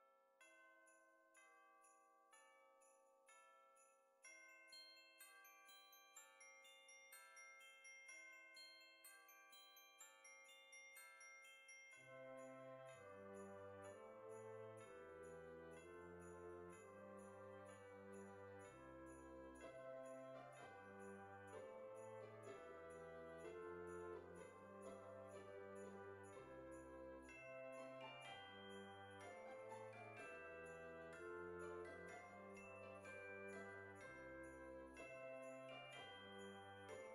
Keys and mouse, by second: 2.5 click, 3.5 click, 8.4 click, 9.1 g, 10.5 click, 10.9 s, 12.7 click, 12.8 g, 13.8 click, 14.3 s, 14.9 click, 15.9 click, 17.0 click, 18.2 click, 21.2 click, 22.0 middle click, 22.7 g, 27.3 click, 27.9 KP_1, 29.4 shift+middle click, 31.2 right click, 31.7 click, 33.2 click, 33.9 Tab, 35.6 click.